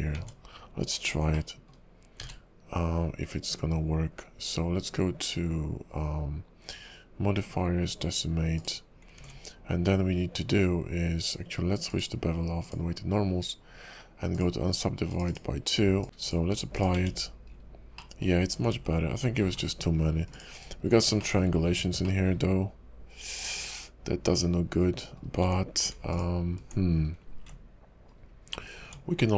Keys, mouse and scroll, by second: 0.1 Tab, 1.3 middle click, 2.2 q, 9.3 ctrl+`, 15.2 click, 16.0 Tab, 16.0 ctrl+`, 16.0 scroll down 4, 17.0 Tab, 17.5-17.9 scroll up 4, 17.9 middle click, 18.3 scroll down 4, 19.4 ctrl+r, 20.8 scroll up 3, 21.2 shift+middle click, 21.4-22.0 scroll up 2, 22.0 middle click, 25.4 Tab, 26.1 alt+click, 27.0-27.4 scroll down 1, 28.0-28.8 scroll down 2, 28.8 Tab.